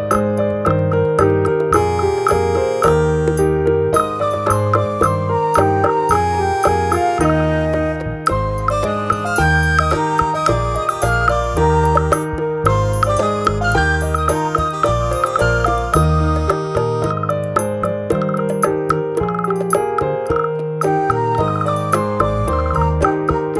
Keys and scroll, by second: 15.6 ctrl+z.